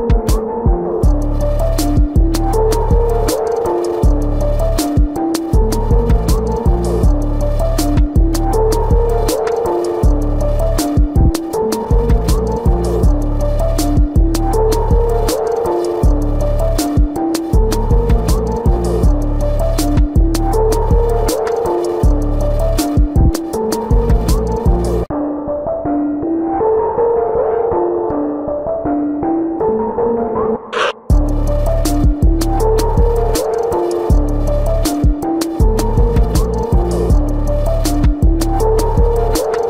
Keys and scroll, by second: 0.3 ctrl+alt+z, 1.4 space, 2.0 ctrl+alt+z, 2.6 space, 2.9 space, 5.2 space, 5.8 space, 6.2 space, 7.5 space, 9.6 space, 12.1 ctrl+-, 13.7 ctrl+-, 14.1 ctrl+-, 14.2 space, 14.4 ], 15.6 ], 16.1 ], 17.0 space, 18.8 ctrl+alt+z, 19.2 space, 24.4 ctrl+alt+z, 24.8 space, 25.1 ctrl+=, 27.3 space, 33.7 typing, 37.0 space.